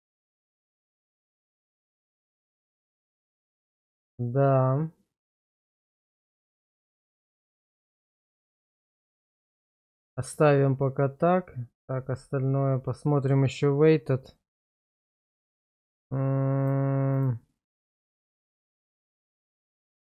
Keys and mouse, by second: 0.1-0.6 drag, 0.7 click, 1.2-2.0 drag, 3.2 ctrl+z, 6.6 click, 9.6 click, 15.0 click, 15.5 click, 16.0 click, 16.6 click, 17.1 click, 17.8 click, 18.3 click, 19.3-20.1 middle drag.